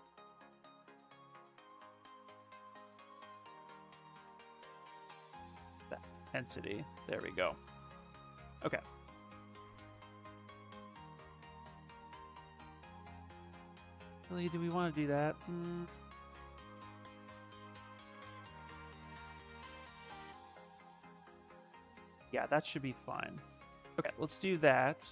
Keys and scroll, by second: 1.0 space, 4.1 z, 4.3 space, 8.0 ctrl+z, 8.5 ctrl+z, 10.3 ctrl+z, 12.7 s, 22.0 ctrl+z, 22.3 ctrl+z, 22.9 ctrl+z.